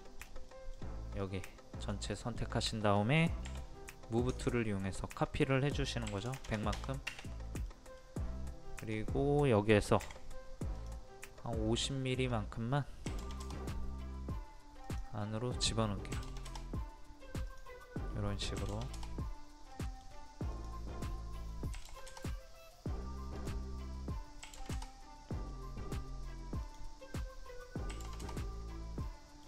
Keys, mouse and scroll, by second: 0.5 middle click, 1.2 click, 2.2 middle click, 2.6-3.5 scroll up 1, 3.5-4.3 scroll up 1, 4.4 ctrl+click, 6.1 KP_1, 7.7 middle click, 8.2-8.8 scroll up 1, 8.8 click, 10.1 p, 10.8 click, 13.1 KP_5, 14.9-15.9 drag, 16.1 KP_5, 17.5 click, 18.6 KP_5, 19.8 middle click, 20.5 click, 21.8 KP_5, 23.4 click, 24.4 KP_5, 25.5 middle click, 26.6 click, 27.9 KP_5, 29.1 middle click.